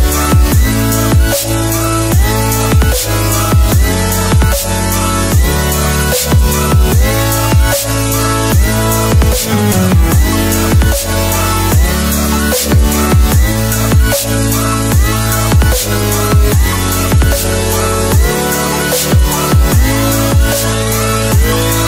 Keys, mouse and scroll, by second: 8.7 ctrl+c, 9.2 click, 10.0 v, 10.5 click, 15.4 Delete, 16.7 click, 21.5 click.